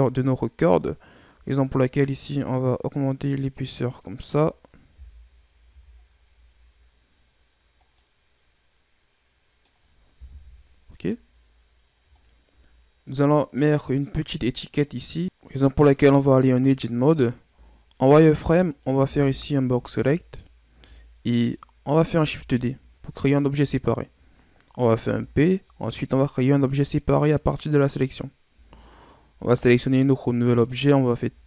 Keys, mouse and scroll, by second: 1.2-4.2 drag, 4.8 KP_1, 5.6 a, 6.0-6.6 scroll down 6, 6.6-7.7 scroll up 8, 7.7 scroll down 2, 7.9-10.2 middle drag, 10.2 KP_1, 11.1-12.7 scroll down 8, 12.7-13.2 scroll up 2, 13.5 right click, 14.8-15.2 scroll down 2, 15.8 Tab, 17.5 z, 18.5 right click, 18.9 b, 20.6 z, 22.1 shift+d, 24.9 p, 28.4 Tab, 29.3 right click, 31.1 Tab.